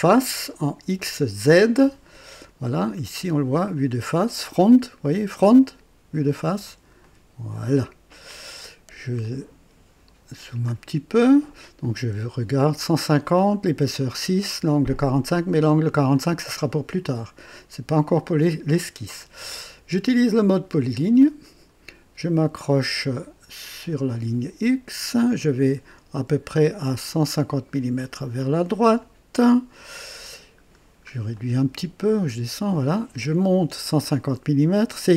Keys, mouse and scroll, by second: 0.9 click, 7.0 click, 8.6-9.0 scroll down 1, 9.2-10.2 right drag, 10.3 scroll down 1, 11.8 click, 18.0 click, 21.1 click, 23.9 click, 29.0 click, 30.6 scroll down 2, 31.3-32.9 right drag.